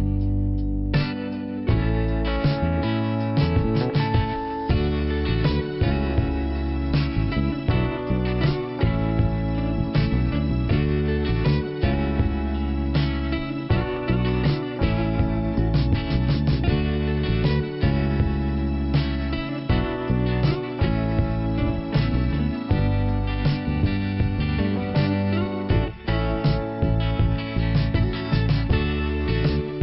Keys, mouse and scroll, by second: 0.1 click, 2.2 right click, 2.2 ,, 3.2 click, 5.0 click, 6.9 click, 7.8 click, 9.1 scroll down 1, 9.6 click, 11.3 click, 11.7 click, 11.8 double click, 12.1 Return, 13.0 click, 13.9 scroll down 1, 16.3 shift+Return, 16.8 middle click, 19.1 click, 20.1 click, 21.2 click, 25.0 click, 25.4 click, 27.6-28.3 scroll down 2.